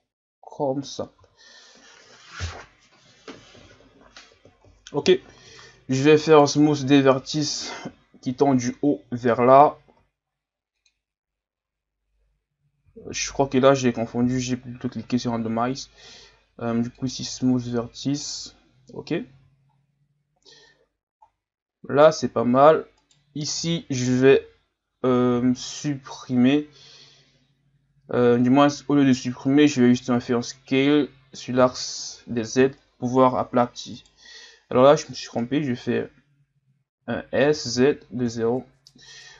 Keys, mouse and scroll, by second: 1.2 z, 1.6-1.9 scroll down 2, 1.9 Tab, 2.3-3.8 scroll down 2, 3.8 scroll up 3, 4.7 scroll down 2, 5.1-5.4 scroll up 4, 5.4 Tab, 6.3 alt+right click, 7.3 alt+right click, 8.2 ctrl+KP_Add, 8.4 ctrl+KP_Add, 8.6 ctrl+KP_Add, 10.0 w, 12.9 ctrl+z, 14.2 w, 18.3 Tab, 19.0 scroll down 2, 19.3 a, 19.7 scroll down 3, 20.4-21.2 scroll up 5, 21.2 scroll down 3, 21.6-22.1 scroll up 3, 22.1 Tab, 23.0 alt+right click, 28.4-28.9 scroll down 1, 31.6 s, 34.9-35.6 scroll up 1, 37.4 s.